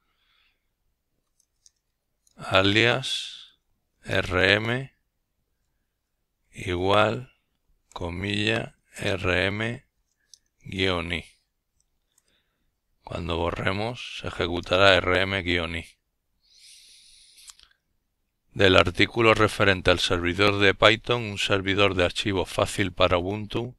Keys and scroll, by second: 1.2-2.3 typing, 3.7-4.2 typing, 5.5 typing, 8.0 Return, 18.1-22.9 typing.